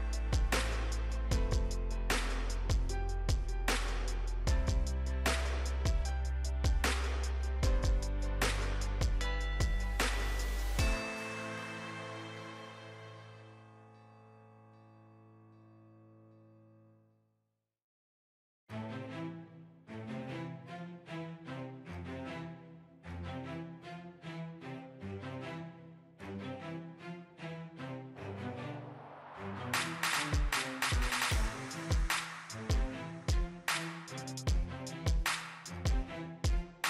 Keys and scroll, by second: 35.8 ctrl+j.